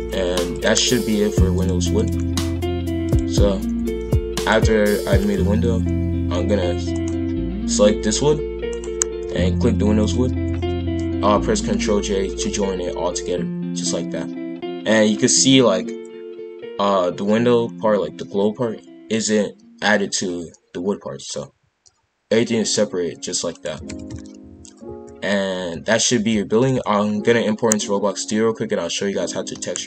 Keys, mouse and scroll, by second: 1.5-3.1 drag, 4.0 g, 5.1 click, 5.8 g, 7.8 g, 10.0 shift+click, 11.7 ctrl+j, 12.4 g, 23.8 shift+f.